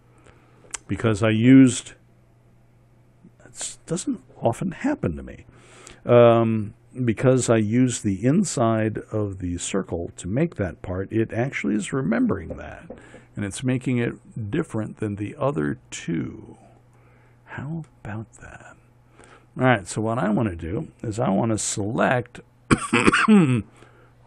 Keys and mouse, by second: 14.5-15.7 middle drag, 22.2 Tab.